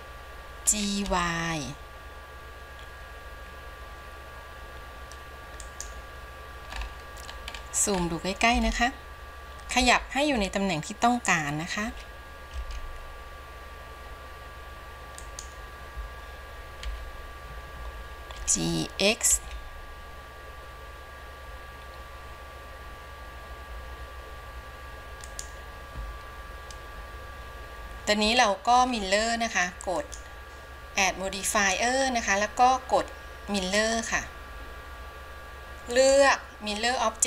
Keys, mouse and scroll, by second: 1.0 g, 7.2-8.8 scroll up 8, 8.9-9.9 shift+middle drag, 12.0 g, 17.0 KP_1, 18.4 g, 30.1-37.2 drag.